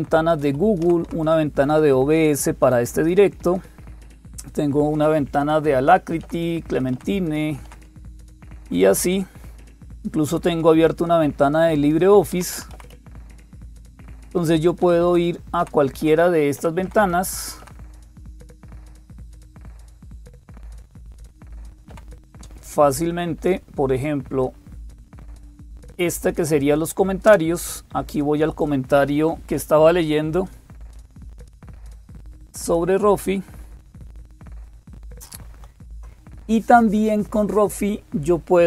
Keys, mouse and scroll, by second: 0.0-38.6 typing, 0.3 Up, 0.6 Down, 0.9 Down, 3.2 Down, 6.0 Down, 6.8 Down, 7.5 Down, 7.7 Down, 7.9 Down, 8.4 Up, 12.1 Up, 12.4 Up, 12.5 Up, 12.7 Up, 12.9 Up, 13.2 Up, 13.4 Up, 13.6 Up, 14.0 Down, 14.6 Down, 14.9 Down, 15.4 Down, 16.7 Down, 18.7 Up, 18.7 Down, 19.0 Up, 19.6 Up, 19.8 Up, 25.0 Down, 25.2 Down, 27.1 Down, 27.1 Return, 32.4 click, 35.3 super+7.